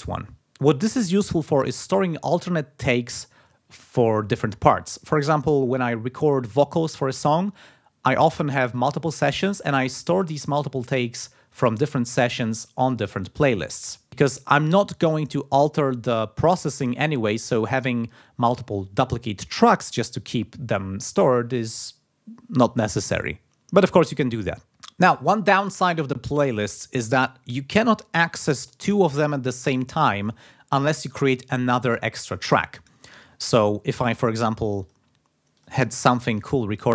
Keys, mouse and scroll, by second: 34.4 click, 35.2 click, 35.7 click.